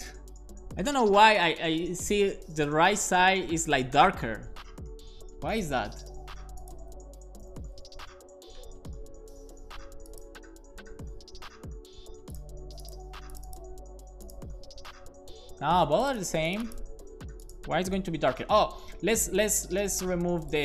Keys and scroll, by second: 7.4 alt+shift+f, 7.8 super+s.